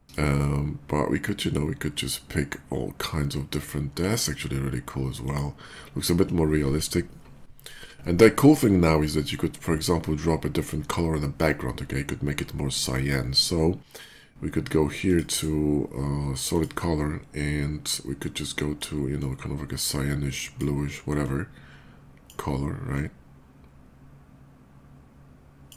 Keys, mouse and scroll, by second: 3.6 click, 5.1 click, 14.8 click, 16.2 click, 18.0 click, 18.8-20.3 drag, 20.9-22.1 drag, 22.7-25.5 drag.